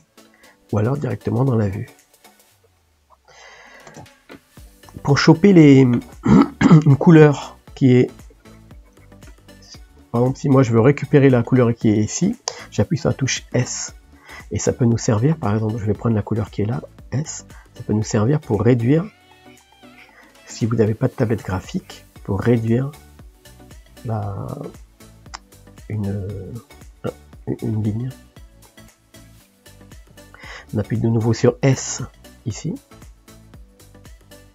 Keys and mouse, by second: 0.5-2.5 middle drag, 2.5 click, 3.1 middle click, 3.9 ctrl+space, 4.7-8.3 middle drag, 8.3-9.4 drag, 9.4 middle click, 10.0-14.7 drag, 14.7-18.0 middle drag, 18.0-26.9 drag, 26.9-27.9 middle drag, 27.9-29.5 drag, 29.5-33.8 middle drag, 33.8-34.5 drag.